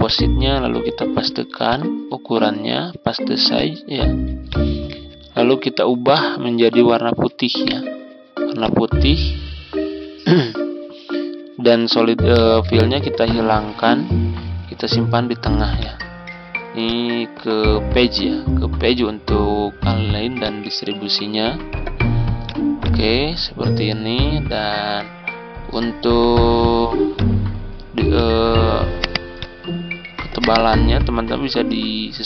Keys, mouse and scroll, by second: 7.5 right click, 8.5-16.7 drag, 29.1-32.2 drag.